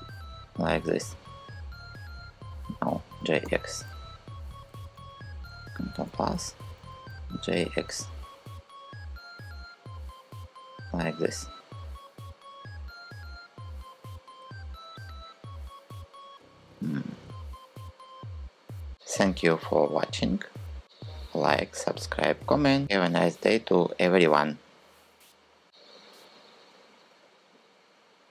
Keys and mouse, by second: 2.7 g, 3.2 x, 5.4 ctrl+KP_Add, 5.7 ctrl+KP_Add, 5.7 ctrl+KP_Add, 6.7 g, 7.2 x, 19.4 Tab, 21.9 middle click.